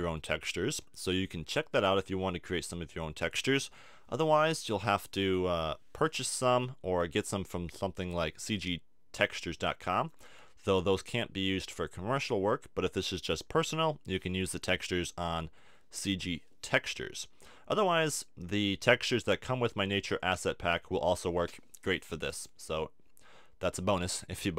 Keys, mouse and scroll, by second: 7.5-24.5 middle drag.